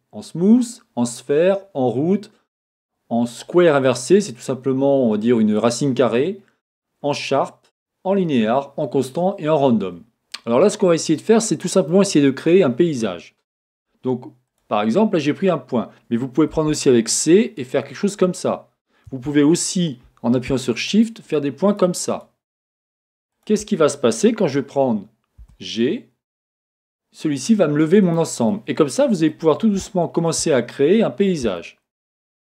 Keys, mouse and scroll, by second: 10.6-14.5 middle drag, 12.3-12.8 scroll, 14.5 scroll down 1, 14.5 click, 16.6 c, 19.2 Escape, 20.8 shift+click, 21.2 shift+click, 21.7 shift+click, 22.1 shift+click, 22.5 click, 22.9 shift+click, 23.3 shift+click, 25.5 g, 28.1 click, 28.5-32.5 middle drag.